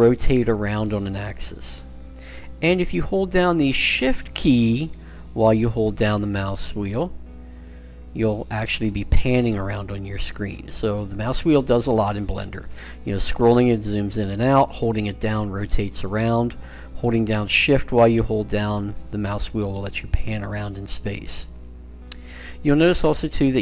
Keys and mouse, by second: 6.0-8.3 middle drag, 13.1 middle click, 15.1-16.1 middle drag, 19.0 middle click, 19.4 click, 19.6 middle click, 21.7-23.6 middle drag.